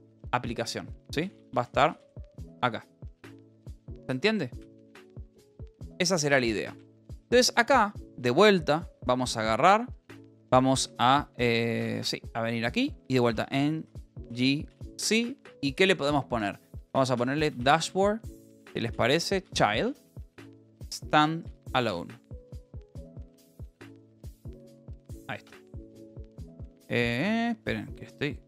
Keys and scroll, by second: 5.7 Return, 6.7 j, 7.1 Return, 8.9 Down, 11.1 Down, 11.9 Down, 13.2-15.2 typing, 16.6-25.5 typing, 27.2 Up.